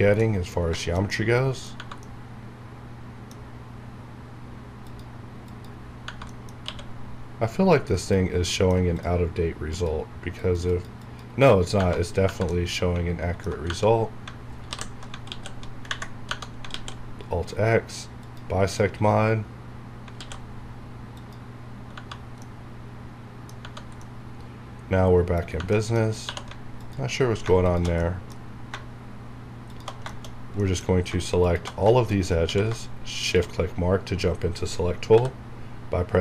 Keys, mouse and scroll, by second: 0.2 middle click, 0.8 shift+middle click, 1.7 Tab, 2.0-4.8 middle drag, 4.8 click, 6.0 Tab, 6.3 middle click, 6.6 q, 7.9 click, 8.5 middle click, 8.9 click, 10.6 click, 11.0 click, 11.7 Tab, 12.4 middle click, 13.6 Tab, 14.6 alt+h, 14.7 alt+j, 16.6 alt+x, 18.2 click, 20.2 alt+x, 21.1 click, 22.4 middle click, 23.6 Tab, 23.9-25.6 middle drag, 25.6 Tab, 25.7 middle click, 26.0 scroll up 1, 26.2 2, 26.8 alt+click, 28.0-29.7 middle drag, 29.7 alt+shift+click, 30.1 middle click, 30.3 scroll up 2, 30.6 middle click, 31.1-31.4 scroll up 1, 31.4 click, 31.9 middle click, 32.4 q, 33.2 shift+click, 35.1 b.